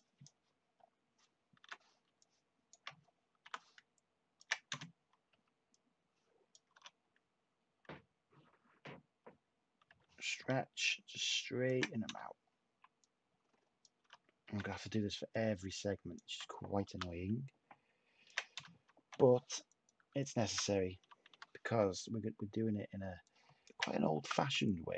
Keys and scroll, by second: 3.1-3.9 typing, 5.2 /, 6.7 u, 9.8 h, 12.6 /, 13.7-14.9 typing, 16.8 t, 18.5-19.3 typing, 21.0 typing, 24.2 t.